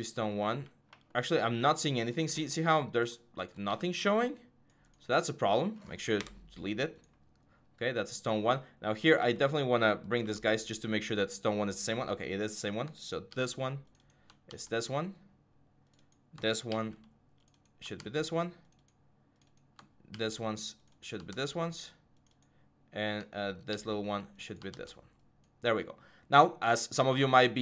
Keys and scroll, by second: 0.1 4, 3.5 w, 6.0 Delete, 9.0 g, 10.0 h, 13.1 ctrl+c, 14.3 ctrl+v, 16.5 ctrl+c, 17.8 ctrl+v, 19.9 ctrl+c, 21.1 ctrl+v, 23.5 ctrl+c, 24.5 ctrl+v.